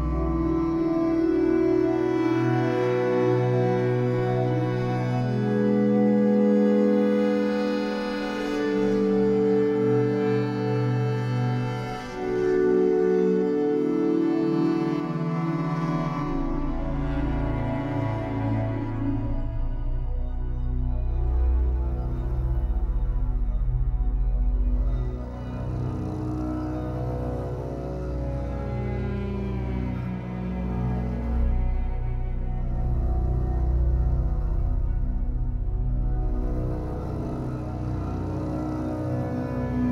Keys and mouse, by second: 4.0 click, 4.7 click, 5.8 typing, 6.2 click, 7.4 click, 8.4-10.9 typing, 11.6 click, 12.4 click, 12.5-13.9 typing, 14.6-18.3 drag, 19.0-21.1 typing, 20.0 click, 20.9 click, 22.9 typing, 24.9-25.6 typing, 25.3 click, 26.6-28.5 drag, 28.5-29.2 typing, 29.8 click, 30.8-31.6 drag, 31.8 typing, 32.8 click, 33.8-35.0 drag, 35.8-36.5 typing, 36.8 ctrl+alt+click, 37.2 alt+shift+click, 38.2 click, 38.2-38.6 typing.